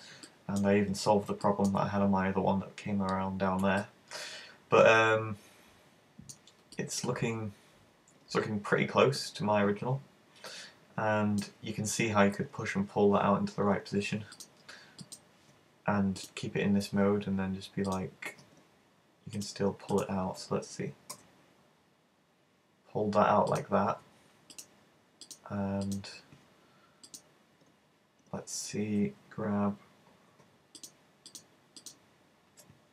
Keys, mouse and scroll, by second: 0.4 middle click, 0.7-1.5 scroll up 3, 1.5 shift+middle click, 3.8 middle click, 6.8 middle click, 14.4 click, 16.2 right click, 18.0 click, 19.4 right click, 20.0 shift+right click, 21.2 g, 23.6 click, 24.6 shift+right click, 25.2 shift+right click, 25.9 shift+right click, 27.2 shift+right click, 30.4 o, 30.8 shift+right click, 31.4 shift+right click, 31.8 shift+right click.